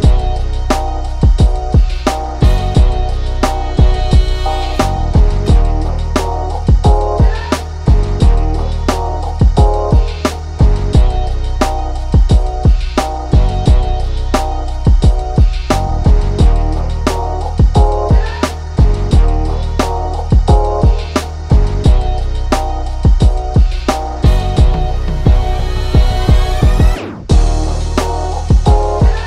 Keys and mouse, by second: 0.1 click, 0.3 b, 4.4 b, 10.4 e, 14.5-16.9 ctrl+middle drag, 16.9 s, 21.5-22.6 drag, 22.6 2, 23.1-24.2 drag, 24.2 s, 27.0 click, 27.7 s.